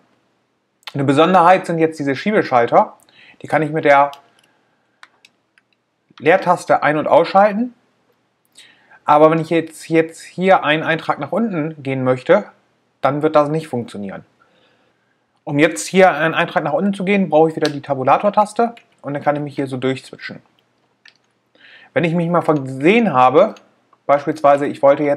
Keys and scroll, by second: 6.8 space, 18.6 Tab.